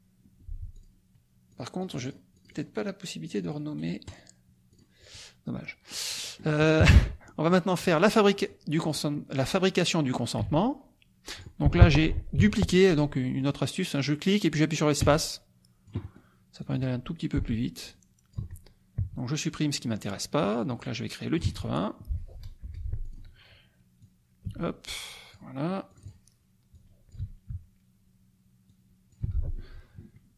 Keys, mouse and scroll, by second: 0.7 click, 1.5-2.7 drag, 3.2 click, 4.0 right click, 4.7 click, 5.6 middle click, 6.2 middle click, 6.8 KP_Subtract, 7.2 click, 8.3 click, 8.8 click, 10.4-11.6 drag, 10.4 space, 12.4 Delete, 12.9 click, 13.3 click, 14.0-16.3 drag, 15.0 space, 16.0 right click, 16.6 click, 18.0 click, 18.3 BackSpace, 19.3 Delete, 20.7 click, 21.5 BackSpace, 22.6 BackSpace, 23.0 click, 24.0-25.5 drag, 24.4 space, 25.9 click, 26.7 click, 27.2 BackSpace, 28.7 click, 29.2 BackSpace.